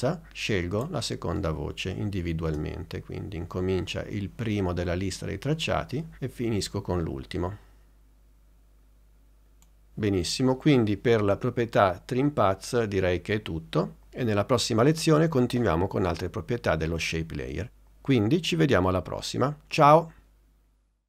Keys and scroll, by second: 2.6 space.